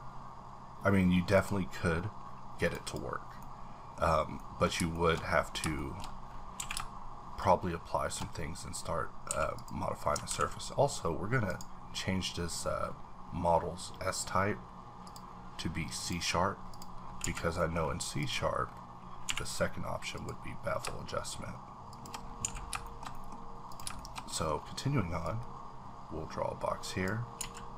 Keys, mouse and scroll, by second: 1.3 click, 2.6 click, 2.8 double click, 3.4 middle click, 4.0-4.4 scroll up 2, 4.4 middle click, 4.9 shift+middle click, 5.1-5.6 scroll up 1, 5.8 shift+middle click, 6.0-6.5 shift+scroll up 2, 6.5 q, 7.7 shift+click, 9.0 scroll down 3, 9.3 a, 9.5 click, 10.3 ctrl+`, 11.5 click, 15.1 click, 16.0 click, 16.7 click, 17.0 scroll down 3, 17.2 a, 17.6 middle click, 17.8-18.2 scroll up 3, 18.2 click, 18.6-19.2 scroll up 2, 19.2 q, 20.1 click, 21.9 shift+click, 22.2-22.8 scroll down 5, 22.4 a, 22.8 shift+middle click, 23.3-23.7 scroll up 2, 23.7 click, 23.9 shift+middle click, 24.5 scroll up 1, 25.5-27.1 drag, 27.4 z.